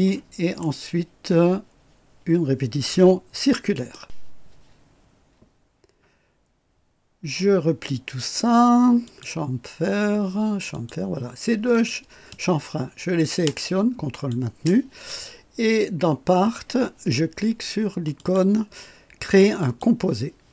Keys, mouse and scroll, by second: 3.7 right click, 9.0 click, 10.7 click, 11.7 click, 14.1 ctrl+click, 18.1 click, 19.6 click.